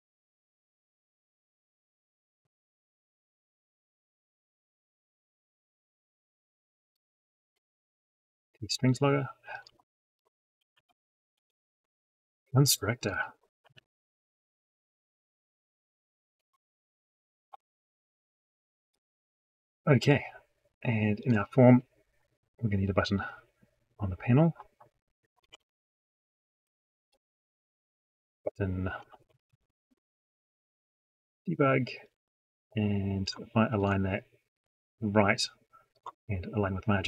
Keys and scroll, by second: 13.5 ctrl+c, 16.2 ctrl+v, 17.3 ctrl+F9, 25.4 ctrl+alt+p.